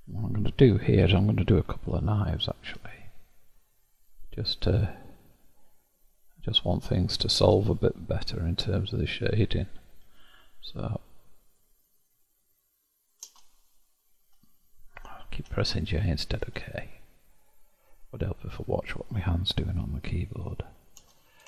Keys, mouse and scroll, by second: 0.9 k, 4.9-7.9 scroll up 1, 10.0 k, 16.3 k.